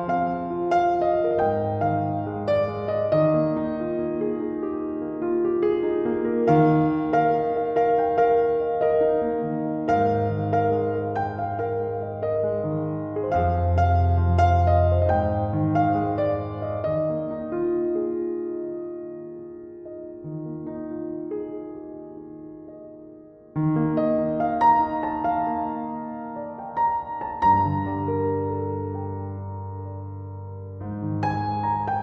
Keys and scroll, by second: 19.3 typing.